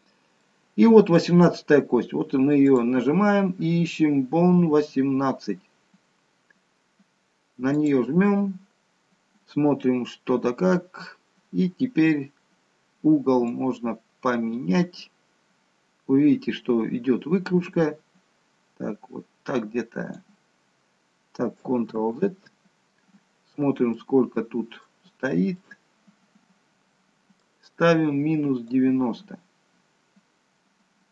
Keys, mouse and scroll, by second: 2.7 click, 13.6 click, 22.1 ctrl+z, 23.7-24.6 scroll down 2, 24.0 middle click, 25.1-26.0 scroll up 4, 25.6 middle click.